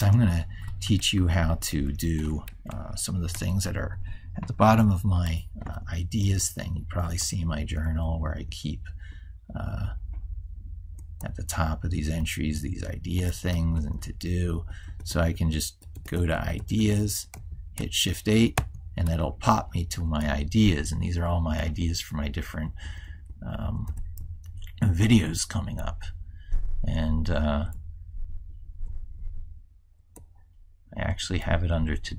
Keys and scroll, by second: 2.3 ctrl+s, 3.8 ctrl+super+Left.